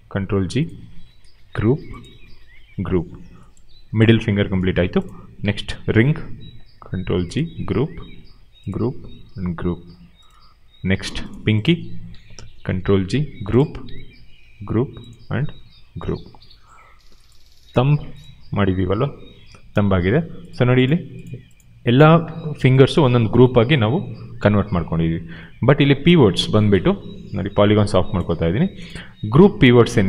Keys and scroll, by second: 1.3 ctrl+g, 2.5 ctrl+g, 6.7 ctrl+g, 8.0 ctrl+g, 12.6 ctrl+g, 14.3 ctrl+g, 15.7 ctrl+g.